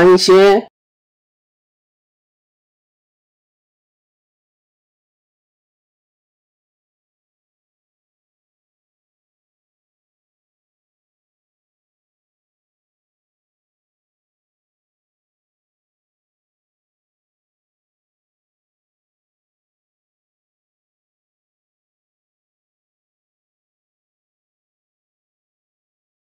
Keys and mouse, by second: 0.2 drag, 1.0 s, 3.5 click, 4.9 s, 6.5 KP_3, 7.2 KP_1, 8.3 ctrl+KP_1, 9.3 ctrl+KP_1, 9.7 ctrl+KP_3, 13.1 middle click, 14.3 KP_7, 15.1 shift+middle click, 16.2 click, 16.7 middle click, 17.7-19.7 middle drag, 20.0 KP_7, 20.3 KP_1, 22.5 middle click, 23.7 middle click, 25.9 shift+middle click.